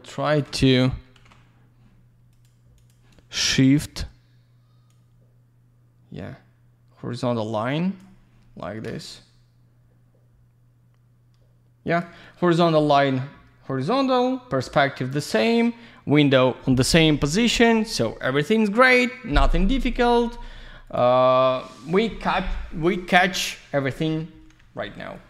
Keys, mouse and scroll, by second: 0.5 ctrl+z, 1.1 ctrl+z, 2.3 click, 2.8 click, 2.9 double click, 4.9 click, 9.1 shift+middle click, 20.8 click, 25.1 click.